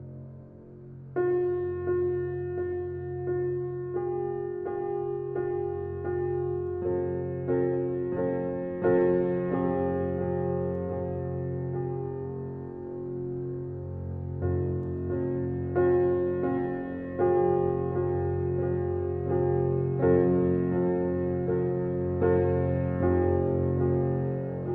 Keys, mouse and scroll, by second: 11.7 click, 12.8 c, 13.4 click, 13.5-24.7 drag.